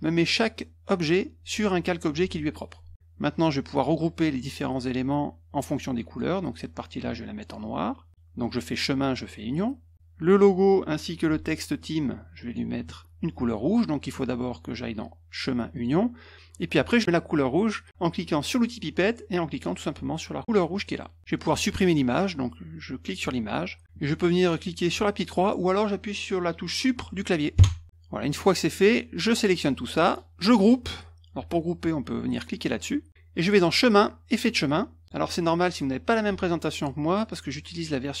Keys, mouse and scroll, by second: 0.3 click, 1.0 click, 3.3 click, 4.3-6.1 drag, 8.7 click, 9.4 click, 9.9 click, 11.8 click, 14.4 click, 15.7 click, 18.5 click, 20.7 click, 21.3 click, 22.2-23.2 drag, 27.5 Delete, 28.4 click, 28.9 click, 33.6 click, 34.6 click, 35.0 click, 37.1 click, 37.8 click.